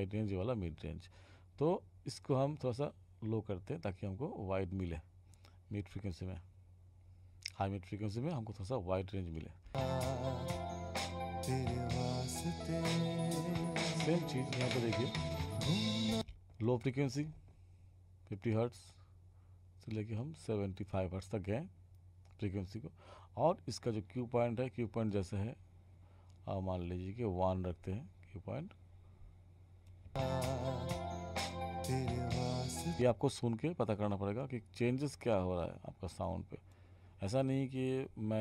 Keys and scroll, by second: 9.6 space, 16.1 space, 30.1 space, 33.0 space.